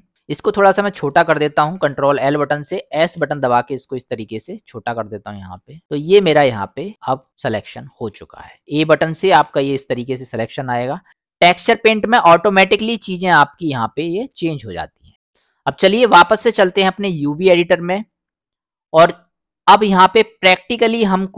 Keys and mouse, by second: 0.2-0.8 drag, 2.1 ctrl+l, 3.2 s, 6.0 click, 7.1 middle click, 7.4 click, 8.6 middle click, 9.4 a, 12.2 click, 13.1 middle click, 14.2 middle click, 15.2 middle click, 19.4 middle click.